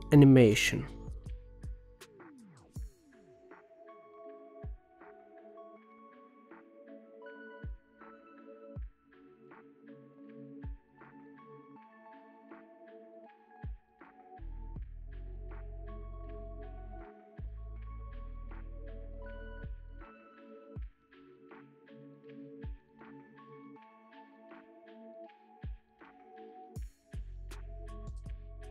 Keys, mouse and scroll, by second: 0.6-3.6 drag, 10.3 click, 10.8 click, 11.8 click, 12.7 click, 13.2 space, 14.2 space, 14.3-15.8 drag, 16.1 click, 16.6 space, 17.6 space, 18.1 click, 19.2 click, 19.9 space, 21.1 space, 21.7 a, 22.2-23.5 right drag, 23.5 click, 23.9 space, 25.2 space, 25.9 click, 26.2 KP_0, 26.6 space, 28.0 click.